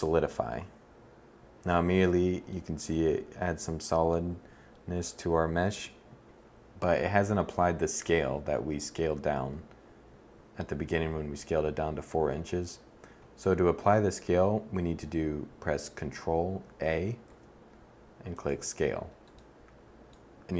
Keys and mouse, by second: 16.8 ctrl+a.